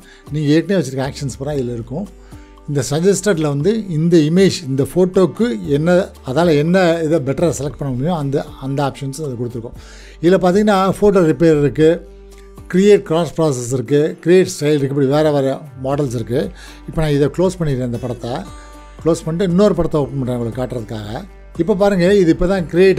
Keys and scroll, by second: 18.7 ctrl+w.